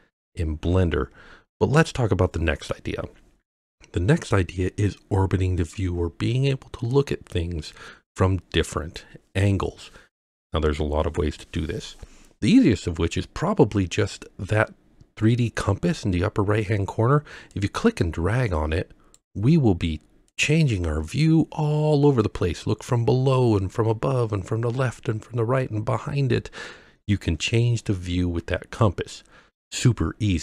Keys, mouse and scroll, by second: 17.5-19.2 drag, 20.3-30.4 drag.